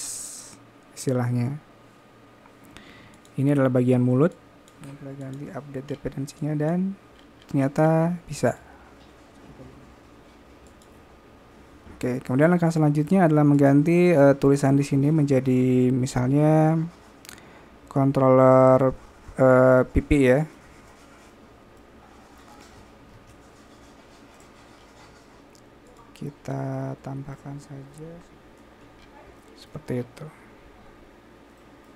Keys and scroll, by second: 23.5 typing.